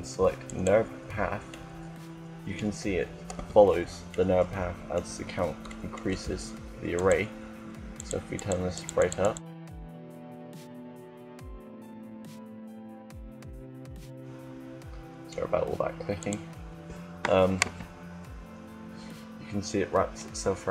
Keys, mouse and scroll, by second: 1.3-3.2 middle drag, 3.2 z, 3.9-6.6 middle drag, 6.6-15.4 drag, 15.4 middle click, 17.6 KP_0.